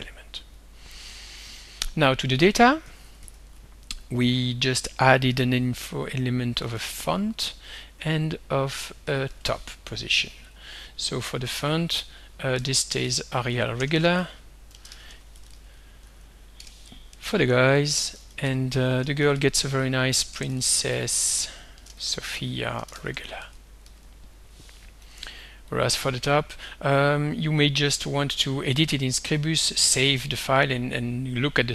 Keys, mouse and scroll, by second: 0.6 click, 2.4 alt+Tab, 3.5 alt+Tab, 4.6 click, 6.3-7.4 typing, 8.0 Tab, 8.8-9.8 typing, 10.4 click, 12.3-16.7 typing, 17.1 Up, 17.6 ctrl+c, 17.8 ctrl+Down, 18.2 ctrl+v, 18.4 ctrl+Up, 18.9-25.0 typing, 25.7 click, 27.9 click.